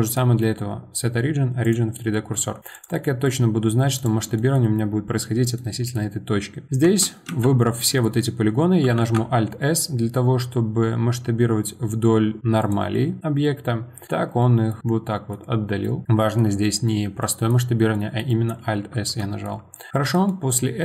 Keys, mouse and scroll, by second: 0.0-2.1 right drag, 2.1-2.7 middle drag, 2.7 click, 3.1-4.0 middle drag, 4.0 click, 4.4-6.8 middle drag, 6.8 Tab, 7.3 a, 9.0 alt+s, 12.9-15.5 middle drag, 15.5 scroll up 2, 15.8-19.2 middle drag, 19.7-20.8 shift+middle drag.